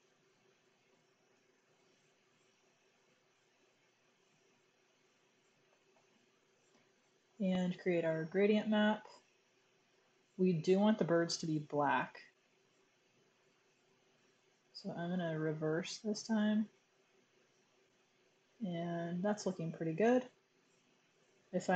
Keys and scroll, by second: 1.2 super+0.